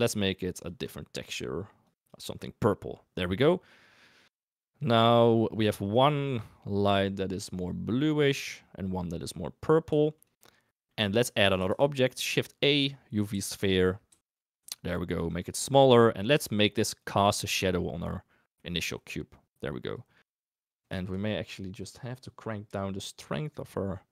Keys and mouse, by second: 0.5 click, 3.4-3.7 middle drag, 4.5 middle drag, 5.1 middle drag, 6.2 middle drag, 7.5 click, 9.0 middle drag, 9.9 shift+drag, 10.8 middle click, 11.6 shift+a, 13.3 g, 14.0 g, 14.5 s, 15.2 right click, 15.7-16.4 middle drag, 16.6 g, 17.3-17.6 middle drag, 18.3 middle drag, 18.8 g, 20.1 middle drag, 20.9 shift+middle drag, 21.7 click, 23.0-24.1 shift+drag.